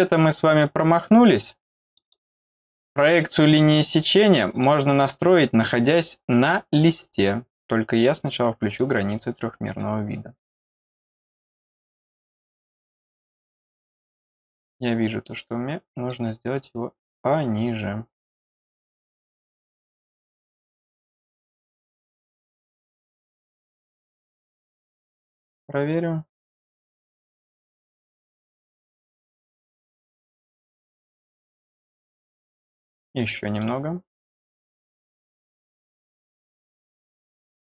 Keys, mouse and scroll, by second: 1.8 click, 2.0 click, 4.5 click, 4.7 click, 8.6 click, 11.9 click, 12.4-12.7 scroll down 2, 14.9-16.1 drag, 18.6 click, 18.8 click, 20.4 click, 23.3 click, 23.4 click, 24.7 click, 26.4 click, 27.0-27.4 scroll up 2, 28.5 click, 29.5 click, 30.4-30.8 scroll down 2, 31.0 middle click, 31.9-32.2 scroll up 2, 32.6 scroll down 1, 33.1 middle click, 34.1 click, 35.2 click, 37.5 click.